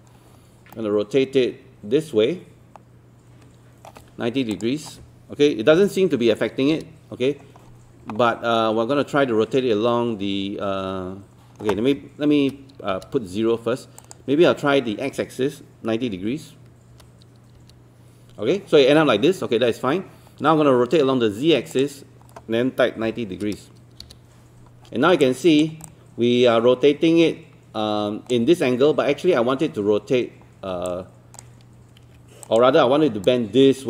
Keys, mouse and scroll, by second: 4.5 click, 5.8 KP_9, 14.0 click, 16.2 KP_9, 21.7 click, 23.1 KP_9, 25.2 alt+click, 25.9-28.4 alt+drag, 30.9 alt+click, 32.0 ctrl+1, 32.4 click.